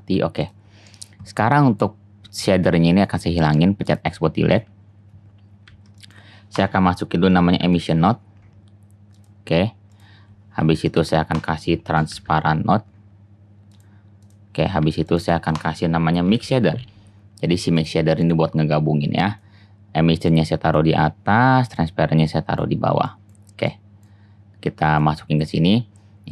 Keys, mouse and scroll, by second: 4.6 x, 4.8-5.2 drag, 5.8-7.5 shift+drag, 5.8 shift+a, 8.8 click, 10.7 shift+a, 13.8-14.8 drag, 14.8 shift+a, 15.1-18.1 drag, 18.1-19.2 middle drag, 25.9-26.3 middle drag.